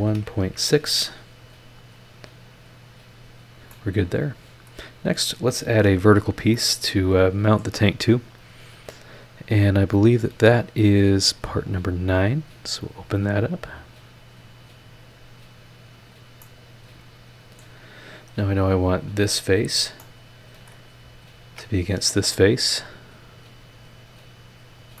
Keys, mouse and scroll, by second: 0.0-0.4 typing, 2.8 click, 3.7-4.9 middle drag, 4.0 click, 6.4 scroll down 1, 6.5-7.8 middle drag, 6.7-7.8 drag, 10.9 click, 12.8 click, 14.4 click, 16.0 click, 16.4-17.8 middle drag, 17.9-18.5 scroll up 4, 19.1 click, 19.5-19.9 scroll down 2, 20.0 middle click, 20.1 click, 21.4 ctrl+click, 23.1 click, 24.7-25.0 drag.